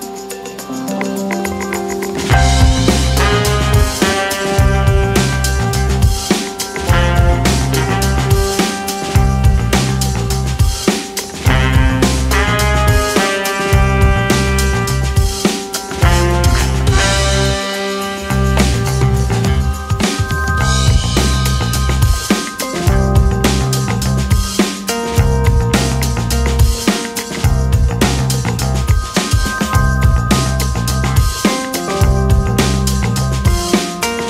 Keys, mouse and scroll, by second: 1.2 shift+a, 2.3 scroll down 1, 3.3 shift+z, 3.7 Tab, 4.2 ctrl+r, 4.7 click, 5.7 x, 6.8-7.3 scroll down 1, 7.3 click, 7.7-9.2 drag, 9.9 click, 11.3 a, 11.5-12.0 scroll up 1, 12.0 s, 12.8-13.5 scroll up 4, 13.5 s, 16.1 scroll up 1, 16.6 click, 17.4 g, 19.2 click, 19.4 g, 20.4-20.8 scroll up 2, 20.8 click, 21.7 g, 23.0 click, 23.2 g, 24.4 click, 24.6 g, 25.8 click, 26.2 g, 27.2 click, 27.4 g, 28.6 ctrl+r, 29.5 g, 30.6 click, 31.0 g, 32.5 click, 33.5 e.